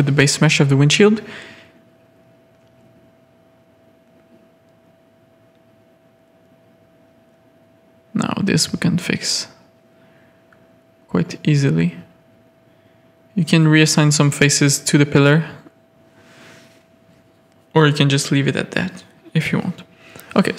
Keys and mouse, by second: 0.6 a, 0.8-1.3 drag, 1.5 Tab, 2.5-3.1 drag, 3.6 drag, 4.5 Tab, 4.7 drag, 4.9 z, 5.1 a, 6.7 z, 7.3 Tab, 7.6 Tab, 8.1 ctrl+r, 10.8 Tab, 11.2 alt+a, 11.8 drag, 12.3 ctrl+z, 12.5 ctrl+z, 13.1 ctrl+z, 13.4 Tab, 14.0 alt+a, 14.5 drag, 15.4 shift+middle drag, 15.7 Tab, 15.9 middle click, 17.1 shift+middle click, 17.3 middle click, 17.8 Tab, 18.0 middle click, 19.5 click, 20.1 shift+d.